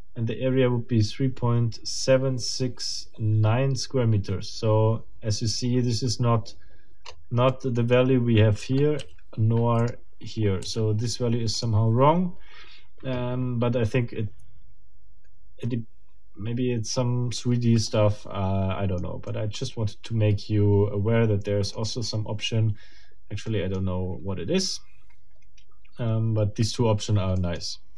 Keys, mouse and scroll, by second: 7.0-7.4 scroll up 2, 7.5 middle click, 14.2 scroll down 2, 17.6 scroll down 2, 17.9-19.2 middle drag, 19.3-22.0 middle drag, 23.5 middle click, 27.4 middle click, 27.8 scroll down 2.